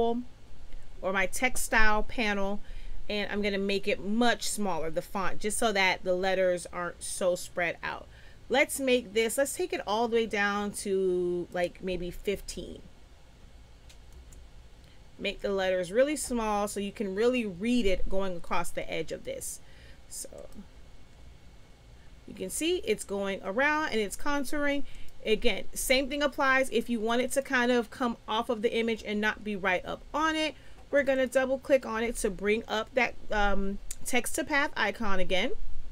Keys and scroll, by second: 12.4 1, 12.5 5, 14.1 Return.